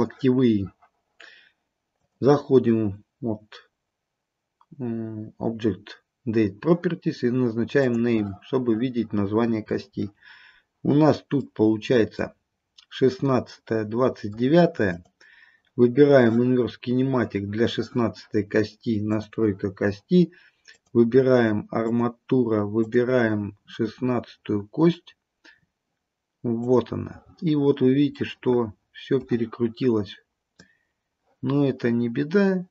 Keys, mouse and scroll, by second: 2.1 click, 7.9 click, 9.6-10.4 scroll up 1, 10.4-10.9 scroll up 1, 11.6 middle click, 13.6 middle click, 15.0 click, 19.2 click, 20.9 click, 22.9 click, 27.8-28.3 scroll down 2, 28.3 middle click, 28.9 middle click, 30.7 click.